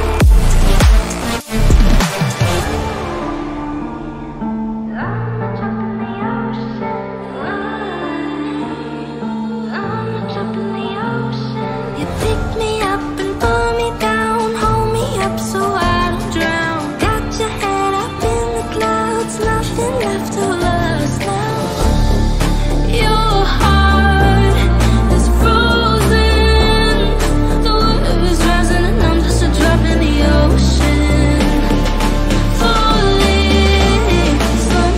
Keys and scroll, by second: 0.5 ctrl+z, 1.3 F3, 8.4 shift+Page_Down, 17.0 shift+F2, 17.1 Escape.